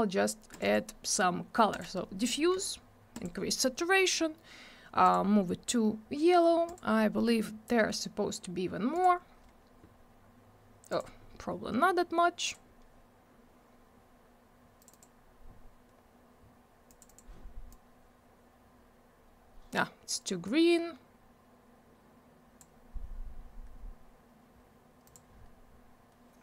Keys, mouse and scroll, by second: 0.5 click, 0.6 click, 0.7 double click, 1.7 click, 3.1 click, 5.0 click, 6.6 click, 8.9 click, 10.9 click, 12.4 click, 14.8 click, 14.9 click, 16.8 click, 17.0 click, 17.7 click, 25.0 click.